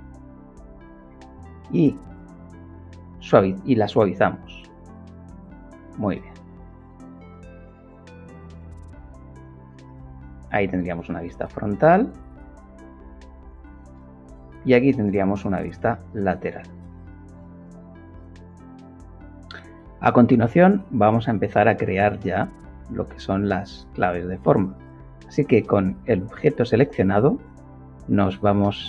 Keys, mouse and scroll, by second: 1.5 right click, 2.6 click, 5.9 middle click, 8.5 KP_5, 9.8 KP_1, 10.5 middle click, 14.2 ctrl+KP_3, 15.2-16.7 middle drag, 28.3 ctrl+shift+click.